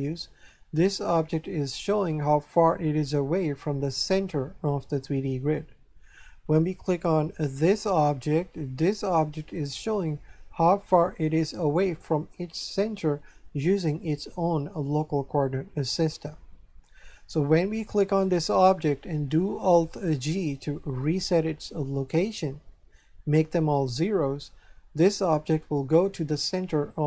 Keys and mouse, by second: 7.7 right click, 18.2 right click, 20.3 alt+g.